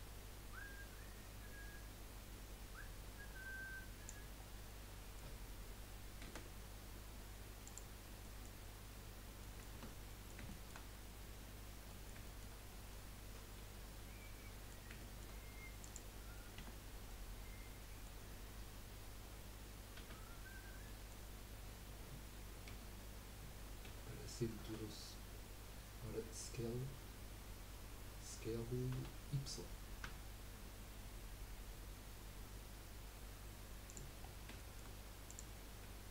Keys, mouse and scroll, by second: 4.4 scroll down 2, 4.7-6.4 middle drag, 6.4 z, 8.2-9.7 middle drag, 9.7 Tab, 10.8 scroll up 2, 11.9 middle click, 12.6 scroll up 2, 12.9-15.8 middle drag, 15.8 click, 16.6 Tab, 17.1-20.0 middle drag, 20.0 a, 20.8 middle click, 21.2-22.7 scroll up 1, 22.7 KP_3, 23.8 z, 29.0 s, 34.2 scroll up 1, 34.3 scroll down 2, 34.6 shift+middle click, 35.3 click.